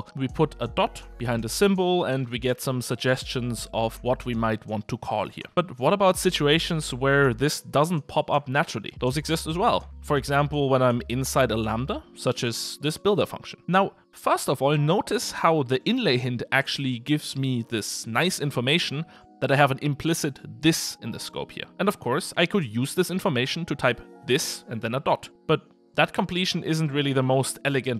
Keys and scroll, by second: 1.0 Return, 5.4 Return, 10.5 Tab.